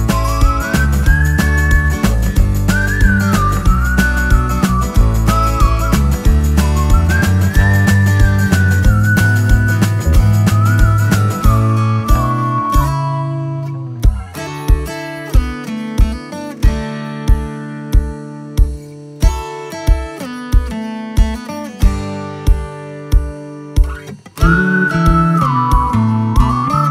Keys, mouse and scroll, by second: 1.9 Return, 2.5 click, 5.4 click, 10.4 Return, 11.2 alt+scroll up 1, 12.0-12.4 scroll up 1, 12.4 Up, 14.9 Down, 15.8 Up, 16.5 alt+scroll down 1, 17.9-18.3 scroll down 1, 18.4-18.8 scroll up 1, 19.3 space, 19.5 click, 19.8 space.